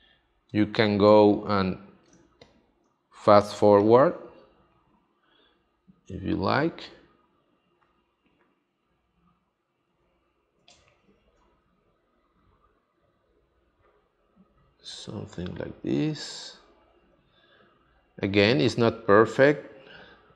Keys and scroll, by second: 2.1 space, 10.6 space.